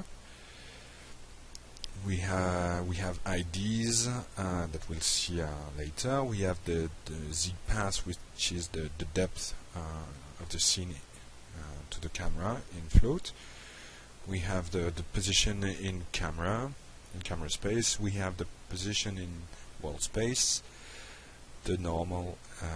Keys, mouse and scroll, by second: 2.4 click, 5.9 click, 7.9-13.9 shift+drag, 14.8 click, 16.1 click, 18.4 click, 19.7 click, 21.9 click.